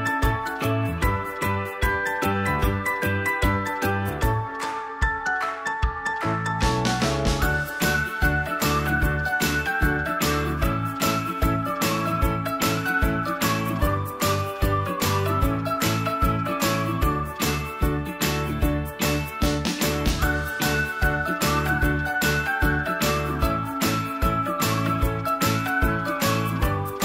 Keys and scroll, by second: 24.1 End.